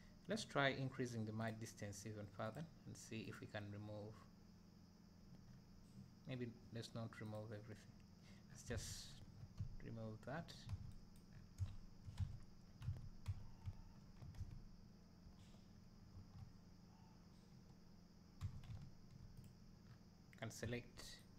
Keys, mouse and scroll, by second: 1.1 e, 1.6-5.5 drag, 5.5 middle click, 7.9-8.5 drag, 8.7 alt+a, 9.2 Tab, 10.7 alt+a, 11.3-11.6 scroll up 2, 11.6 `, 12.2 Tab, 12.9 alt+a, 13.3 Tab, 13.6 `, 15.3 Tab, 15.8-16.1 scroll up 2, 16.1 2, 19.4-19.9 drag, 19.9-20.6 scroll down 2, 20.6 `.